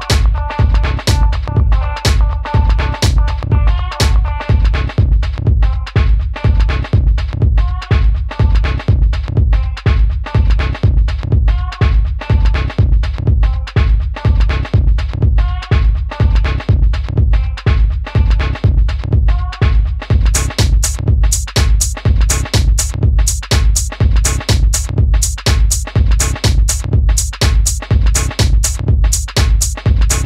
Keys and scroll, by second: 4.8 Up, 24.1 super+z.